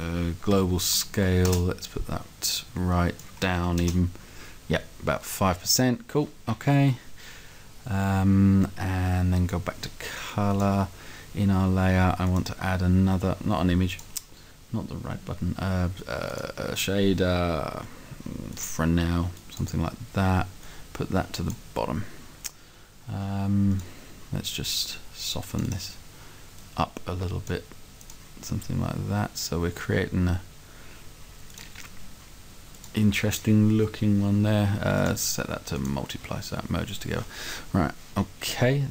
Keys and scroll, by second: 0.5 3, 0.8 0, 1.5 Return, 3.6 5, 3.8 Return.